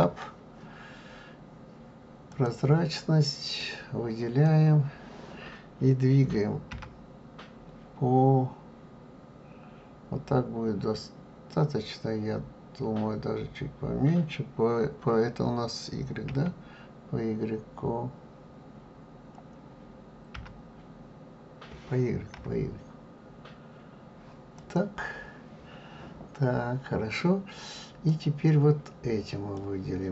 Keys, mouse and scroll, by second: 2.3 click, 3.6 click, 6.7 g, 28.1 click.